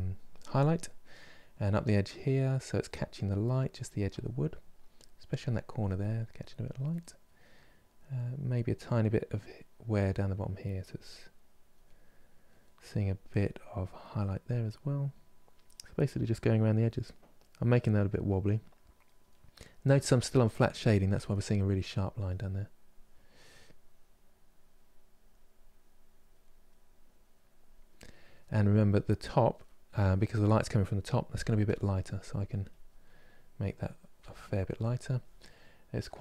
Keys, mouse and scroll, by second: 0.2 click, 0.8 middle click, 1.4-6.7 drag, 6.7 middle click, 7.3-11.5 drag, 11.5-12.7 middle drag, 12.7-15.2 drag, 15.3-18.0 drag, 18.0-19.8 middle drag, 19.8-21.0 drag, 21.0 middle click, 21.8 click, 22.8 middle click, 23.4-26.1 drag, 26.1 middle click, 26.7-27.7 drag, 27.7 middle click, 28.5 click, 29.3-31.0 middle drag, 31.0 f, 31.8 click, 32.7-33.8 middle drag, 33.8 f, 35.6-36.2 drag.